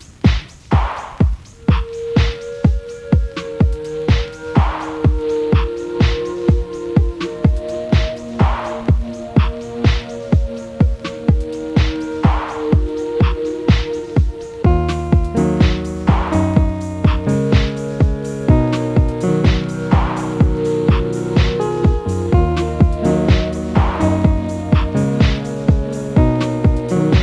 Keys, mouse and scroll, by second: 0.2 click, 1.2-2.5 middle drag, 2.5 a, 3.8 click, 5.5 click, 5.9 click, 6.7 ctrl+z, 7.0 ctrl+z, 7.6 click, 9.0 click, 9.3 click, 10.5 a, 11.5 click, 13.1 drag, 13.5 click, 15.0 a, 15.4 click, 17.2 click, 17.5 click, 18.7 click, 19.0 click, 19.5-20.9 middle drag, 20.9 a, 21.2 click, 22.8 click, 23.0 click, 23.5 click, 23.8 click, 24.5-25.7 middle drag, 25.7 a, 26.3 click.